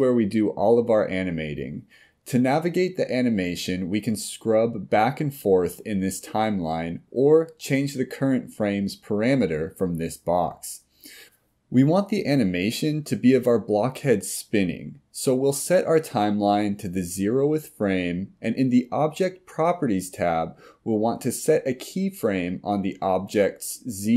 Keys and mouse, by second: 6.1 click, 17.7-19.4 drag, 21.9 click.